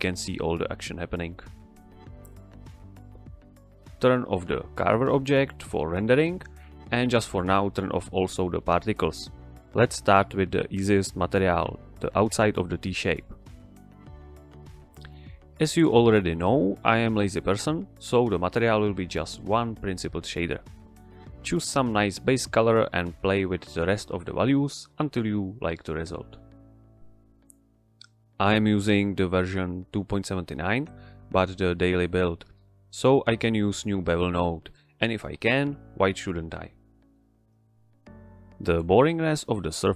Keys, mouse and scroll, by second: 0.5 z, 0.7 z, 0.8 z, 2.5 click, 3.1 Return, 4.8 click, 9.5 click, 12.0-12.6 typing, 12.7 Return, 13.5 click, 15.4 shift+s, 16.5-19.7 drag, 26.3 click, 27.8 shift+a, 32.6 click, 34.4-34.9 middle drag, 35.6-36.6 drag, 38.1 middle click, 38.3 scroll down 1, 38.5 middle click.